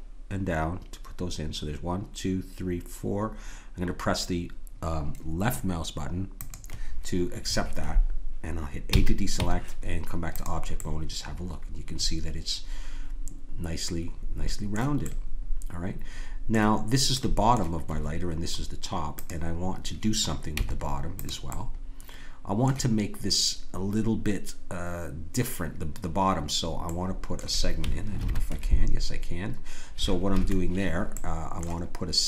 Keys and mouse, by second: 8.9 a, 9.3 Tab, 10.8-12.3 middle drag, 15.0-19.1 middle drag, 19.1-21.3 drag, 20.5 Tab, 21.5-23.4 middle drag, 26.9-28.2 middle drag, 28.2 ctrl+r.